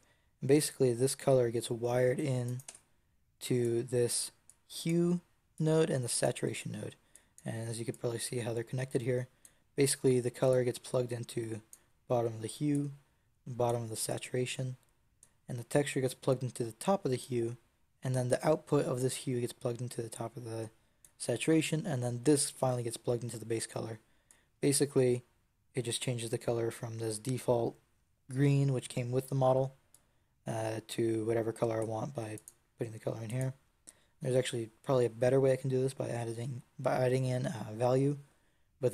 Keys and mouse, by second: 2.5 Tab, 5.5 click, 7.0-8.6 drag, 8.7 click, 20.9 click, 24.2-26.4 drag, 29.8-31.6 drag, 31.6 Tab.